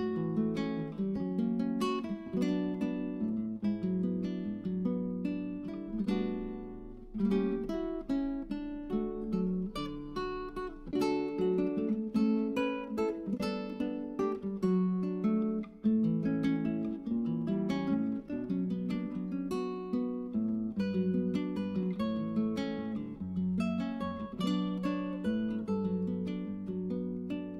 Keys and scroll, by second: 3.2 1, 5.6-7.4 typing, 9.0-9.7 typing, 11.2-14.6 typing.